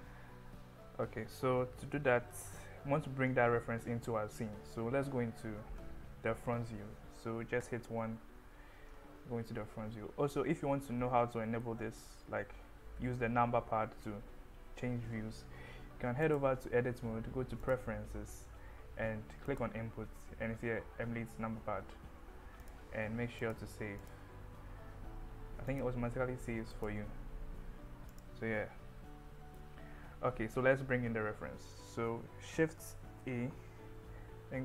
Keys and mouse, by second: 7.7 KP_1, 11.4 middle drag, 12.0 KP_1, 12.3 KP_3, 16.3-17.9 drag, 33.1 shift+a.